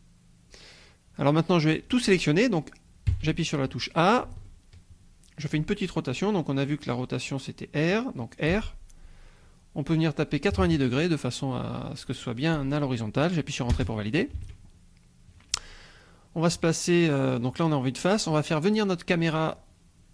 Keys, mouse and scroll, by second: 0.4-0.8 scroll down 2, 0.8-2.9 drag, 3.1 a, 4.4-5.6 shift+drag, 8.5 r, 10.5 KP_9, 10.6 KP_0, 13.7 Return, 14.5 Tab, 17.2 scroll down 2, 17.8 scroll up 2.